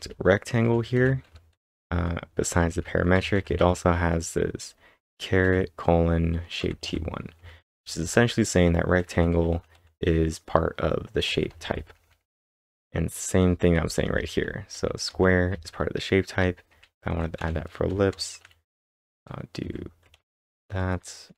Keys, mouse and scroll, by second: 0.0-3.6 typing, 9.1-11.8 typing, 12.9-21.3 typing.